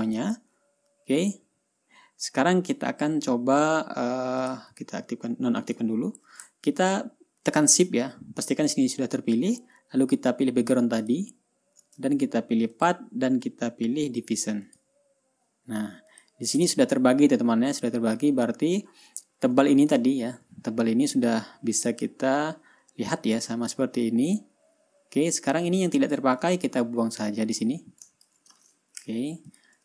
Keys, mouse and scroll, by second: 0.3-0.9 ctrl+scroll down 2, 4.9 click, 6.1 click, 7.0 ctrl+scroll down 2, 11.5 shift+click, 13.2 click, 15.1 click, 16.6 click, 17.2-17.9 ctrl+scroll up 4, 18.1-19.0 ctrl+scroll down 6, 19.3-19.8 ctrl+scroll up 4, 20.5-20.8 ctrl+scroll up 2, 21.8-22.7 ctrl+scroll down 4, 25.1-25.4 ctrl+scroll up 2, 25.6 ctrl+scroll down 1, 26.5 click, 26.9-27.2 ctrl+scroll down 1, 27.6-28.9 ctrl+drag, 29.4 Delete.